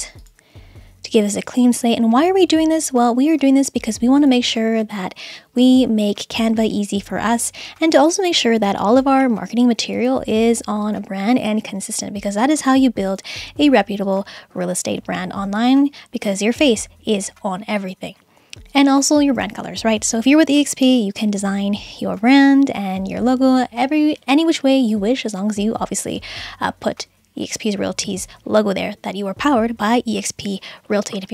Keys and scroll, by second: 1.5 BackSpace, 3.8 BackSpace, 7.3 BackSpace, 9.4 BackSpace, 14.4 BackSpace, 18.1 BackSpace, 22.5 BackSpace.